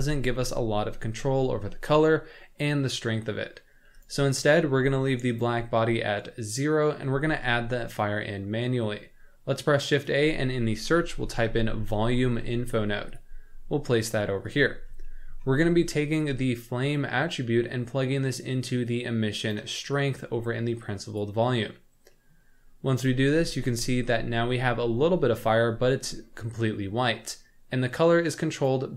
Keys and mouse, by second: 4.0-5.4 drag, 6.3 middle click, 7.3 shift+a, 15.2 middle drag, 16.5-19.6 drag, 19.9-20.2 middle drag, 20.8 click, 22.3 middle click, 23.5 shift+middle drag, 24.1-25.4 middle drag, 27.9 middle click, 28.6 click.